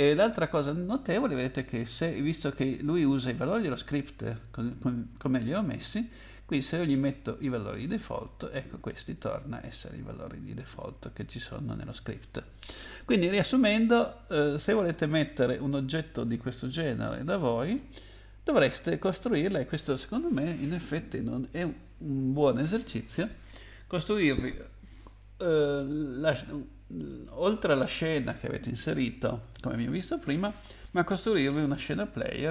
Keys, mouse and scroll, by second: 0.4 click, 6.7 click, 7.5 click, 10.7 click, 13.9-14.7 scroll up 5, 14.9-15.3 scroll down 4, 15.7 middle click.